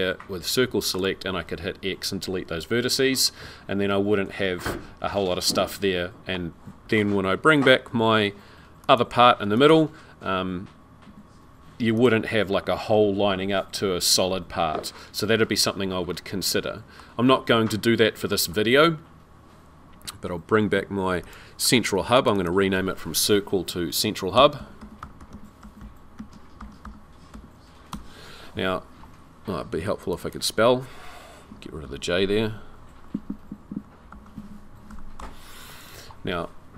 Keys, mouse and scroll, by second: 8.8 click, 9.6 click, 11.0 z, 16.1 middle click, 17.1 scroll down 3, 17.5 middle click, 21.2 click, 22.1 click, 22.4 click, 30.0 click, 30.2 click, 31.6 Left, 31.8 Left, 32.3 Right, 32.5 Right, 32.9 Right, 33.0 Right.